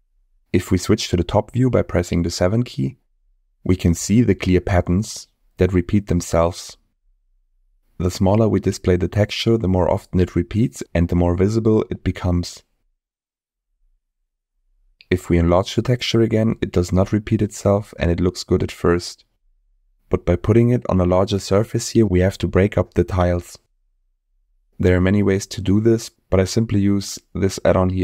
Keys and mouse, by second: 1.1-1.4 middle drag, 2.1 KP_7, 10.4-11.5 drag, 15.0-16.2 drag, 19.5-20.8 drag, 24.2 click, 26.3 middle click.